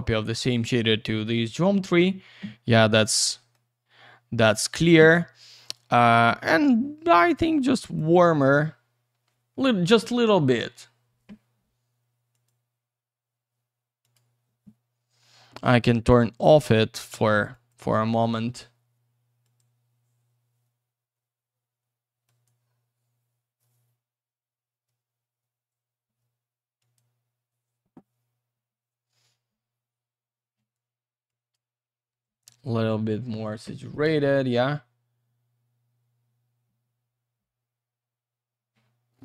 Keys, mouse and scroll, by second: 1.0 middle click, 3.2 middle click, 3.7-4.4 scroll up 1, 4.4 click, 4.7 double click, 5.6 click, 7.8 click, 10.6-11.9 scroll up 1, 12.3 click, 14.0 click, 15.8 click, 17.5 click, 19.4 click, 22.2 click, 26.8 click, 31.3 click, 34.5-35.3 scroll down 1, 37.9 scroll up 1, 38.4-39.2 scroll down 1.